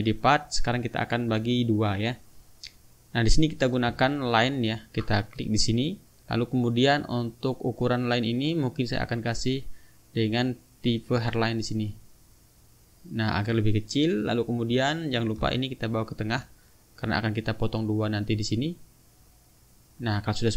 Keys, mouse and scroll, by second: 1.1 click, 1.9 click, 3.5 click, 4.8 ctrl+click, 5.4 ctrl+right click, 8.4 click, 9.6 click, 11.2-12.5 drag, 14.6 click, 15.7 shift+click, 18.3 click, 19.3 click, 19.9 click.